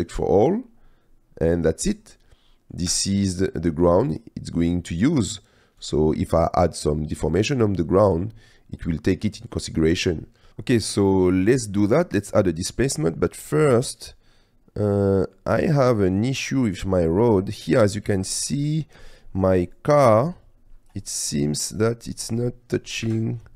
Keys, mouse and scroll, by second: 2.3-2.8 middle drag, 2.9 space, 4.3-5.4 drag, 6.0 space, 6.4-7.4 drag, 8.9-9.4 drag, 10.4 drag, 11.5 click, 13.7-15.5 drag, 15.7 drag, 17.9-18.3 middle drag, 18.5 ctrl+middle click, 21.2 drag, 21.6 click, 23.1 KP_Decimal.